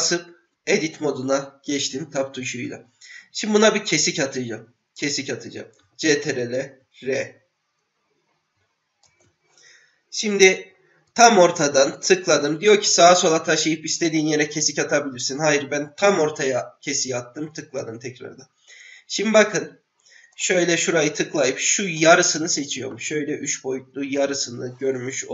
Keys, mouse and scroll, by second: 0.0 Tab, 6.3 ctrl+r, 20.3 click, 20.9-22.0 drag, 22.9-24.2 middle drag.